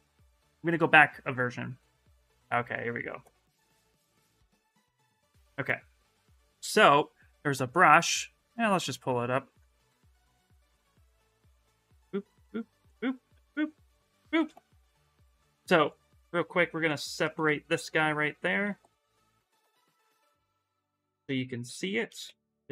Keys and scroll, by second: 4.0 shift+f, 4.4 shift+f, 14.9 shift+f, 22.0 ctrl+z.